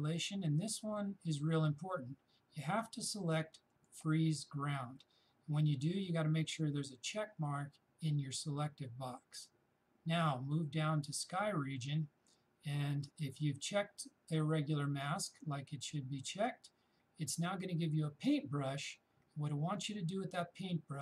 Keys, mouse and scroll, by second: 3.7 shift+click, 11.0 shift+click, 11.2 shift+click.